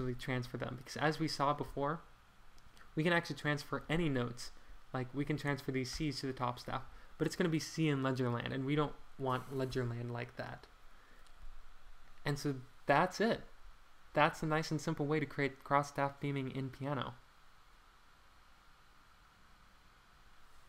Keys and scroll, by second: 0.3 alt+Page_Down, 5.9 alt+Page_Up, 9.7 alt+Page_Down.